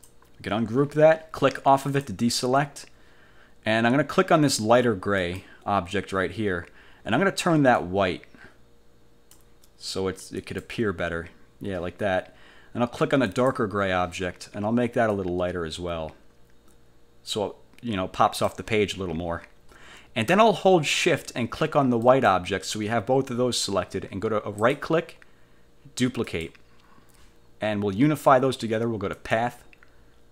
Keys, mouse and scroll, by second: 2.0 click, 5.3 click, 5.7-7.9 middle drag, 7.9-9.7 drag, 10.5 click, 13.4 click, 15.3-18.8 drag, 22.1 shift+click, 24.7 click, 26.4 click, 29.3 click.